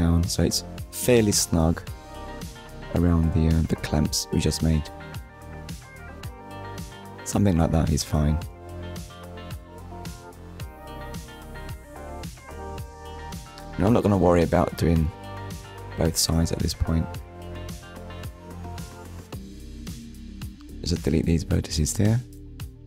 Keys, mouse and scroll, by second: 0.3 click, 1.0 KP_7, 2.0 scroll up 1, 2.5 scroll up 1, 6.7 click, 8.1 click, 9.3 scroll down 1, 10.1 middle click, 11.6 ctrl+r, 12.4 click, 13.3 middle click, 14.3 KP_1, 15.7 click, 17.2 click, 18.2 click, 19.9 Delete, 20.9 click, 22.5 click.